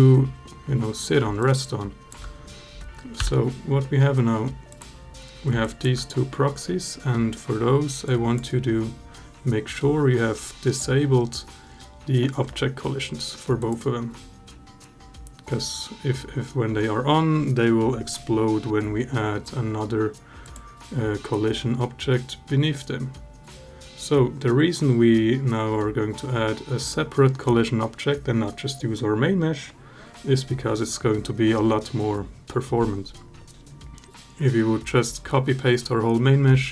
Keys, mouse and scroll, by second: 1.2-1.9 alt+drag, 3.0 h, 4.5 click, 5.4 alt+drag, 7.9 click, 36.6-36.7 alt+drag.